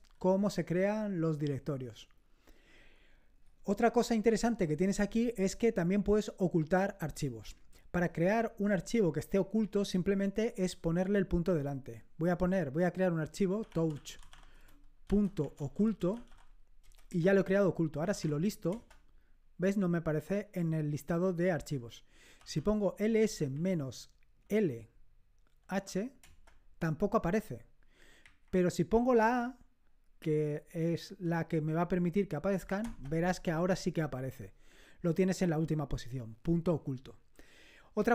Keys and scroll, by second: 4.5 BackSpace, 13.4-18.7 typing, 17.1 Return, 18.7 Return, 22.2-24.4 typing, 25.7 typing, 26.2 Return, 28.2 Up, 28.9 a, 32.9 Return.